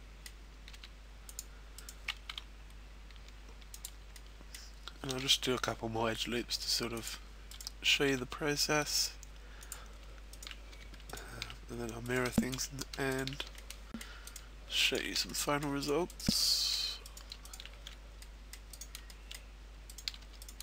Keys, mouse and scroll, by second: 0.1 middle click, 1.1 g, 1.4 click, 1.7 right click, 2.5 e, 3.7 click, 4.1 middle click, 5.6 middle click, 5.6-6.1 scroll up 1, 6.1 g, 7.1 click, 7.5 right click, 9.1 e, 9.8 click, 10.3 shift+right click, 10.7 f, 11.1 shift+right click, 11.9 right click, 12.4 shift+right click, 13.1 right click, 13.4 f, 14.3 middle click, 14.3 right click, 14.8 shift+right click, 15.1 f, 15.7 middle click, 15.7 right click, 17.4 shift+right click, 17.8 f, 18.2 middle click, 18.7 right click, 19.1 shift+middle click, 19.8 right click, 20.2 f, 20.4 right click.